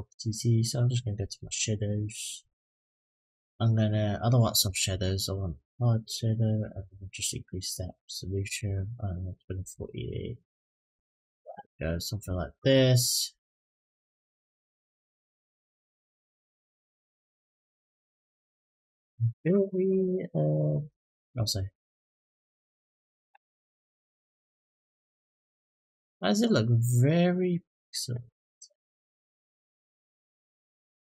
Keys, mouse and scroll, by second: 0.9-1.5 scroll down 2, 2.2 click, 2.7-4.0 scroll down 5, 4.4 click, 6.6-8.3 drag, 9.4-10.8 drag, 13.2-14.9 drag, 16.0-18.1 drag, 21.5 click, 23.1-25.0 drag, 29.7 click, 30.5 click.